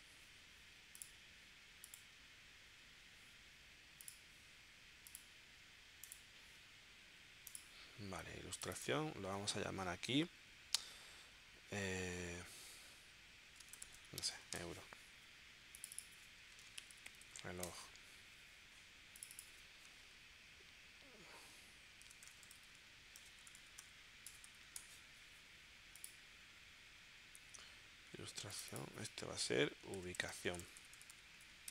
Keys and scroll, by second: 13.4-14.3 typing, 14.7 Return, 16.4-17.3 typing, 17.7 Return, 21.8-25.3 typing, 29.7-31.5 typing.